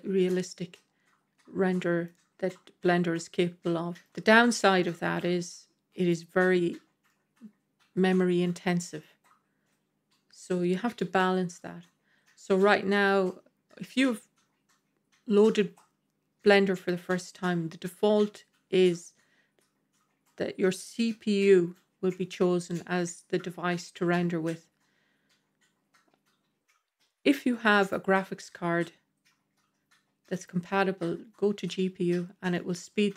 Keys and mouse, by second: 3.4 middle click, 4.7-6.1 middle drag, 7.0-8.9 middle drag, 12.5 middle click, 27.7-31.1 drag, 32.4-33.1 middle drag.